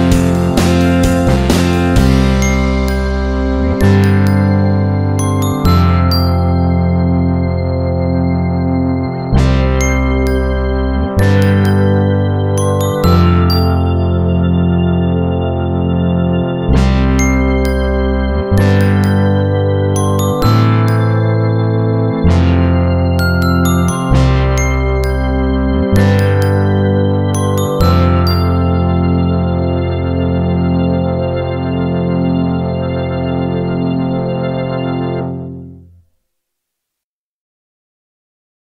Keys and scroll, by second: 2.9-4.6 typing, 24.6-24.9 typing.